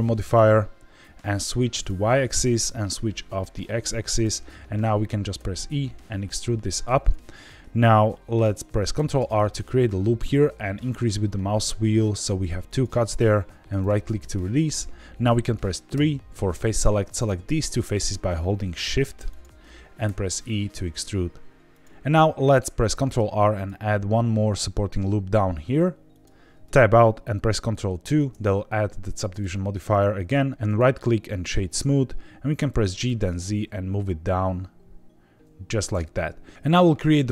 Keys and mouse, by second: 1.7 click, 4.1 click, 5.3 e, 6.9 click, 8.9 ctrl+r, 13.7 right click, 15.9 3, 17.1 click, 19.3 shift+click, 20.0 e, 21.7 click, 22.9 ctrl+r, 26.1 click, 26.5 Tab, 28.0 ctrl+2, 30.0 right click, 30.7 right click, 32.6 g, 33.0 z, 35.8 click.